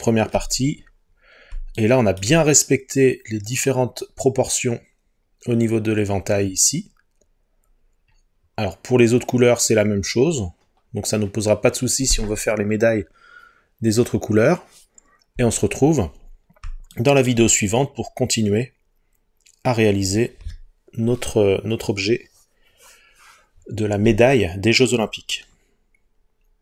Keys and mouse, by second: 1.8 shift+middle click.